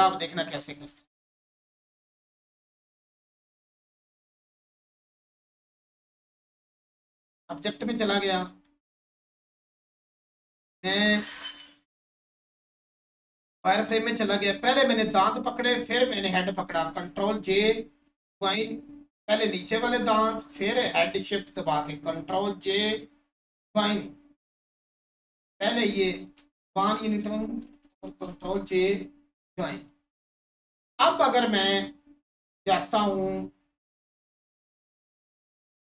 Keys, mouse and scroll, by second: 0.8 Tab, 2.8 click, 6.6 click, 13.1 click, 15.7 shift+click, 20.5 shift+click, 26.8 shift+click, 32.5 click.